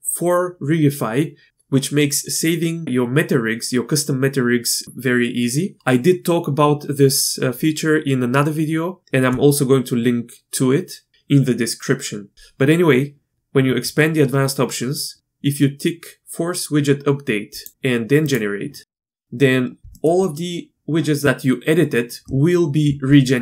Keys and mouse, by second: 17.5 click, 18.3 drag, 19.1-19.8 shift+middle drag, 19.9 shift+middle click.